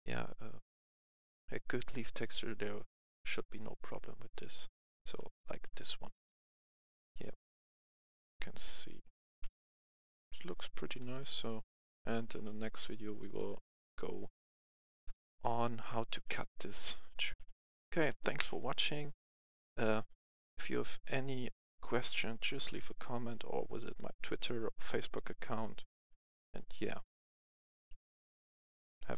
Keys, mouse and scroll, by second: 4.3 click, 5.4 right click, 6.1 right click, 7.0 click, 7.8-8.9 right drag, 8.7-9.6 typing, 10.8-12.8 typing, 14.2 d, 16.5 click, 16.9 s, 17.2 click, 17.3 F11, 17.4 F10, 25.6 F10.